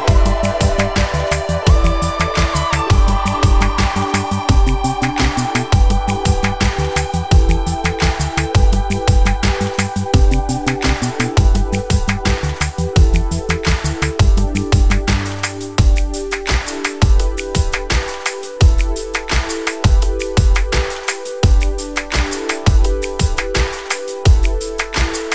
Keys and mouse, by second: 0.0 shift+a, 0.4 middle click, 1.4 Tab, 1.8 1, 2.8 middle click, 5.0 shift+middle click, 5.7 s, 10.2 s, 17.7 shift+middle click, 18.1 middle click, 18.6 shift+middle click, 20.7 a, 21.7 e, 22.3 s, 23.7 click, 24.1 click, 24.6 s.